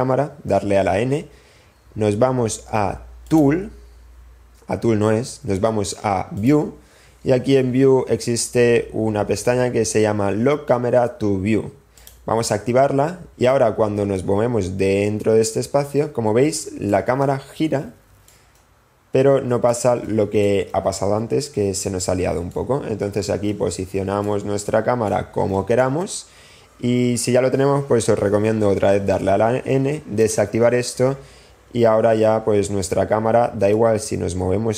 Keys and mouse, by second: 1.6 n, 3.5 click, 11.9 click, 13.4 n, 14.7-16.1 drag, 17.9-18.8 shift+drag, 19.2 shift+click, 20.4 click, 22.2 shift+click, 23.1 shift+click, 24.7 shift+click, 26.1 click, 29.1 n, 30.7 click, 32.1 n, 34.4-34.7 drag.